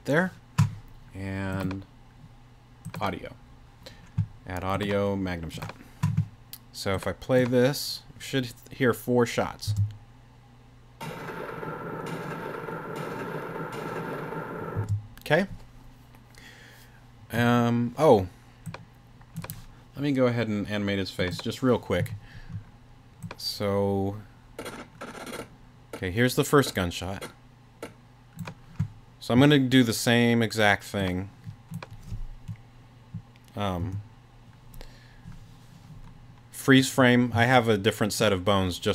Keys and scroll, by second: 9.7 space, 14.8 space, 33.8 BackSpace, 37.3 space.